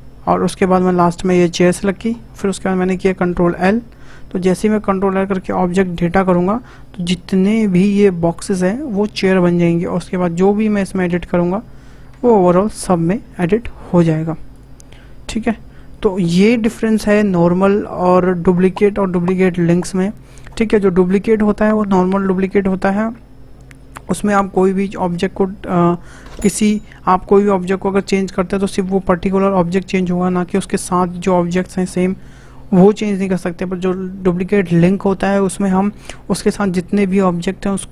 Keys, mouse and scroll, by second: 1.5 shift+click, 3.5 ctrl+l, 10.4 click, 11.1 Tab, 11.9 middle click, 12.8 e, 14.2 ctrl+z, 14.5 click, 14.9 scroll up 2, 15.1 Tab, 15.5-18.6 middle drag.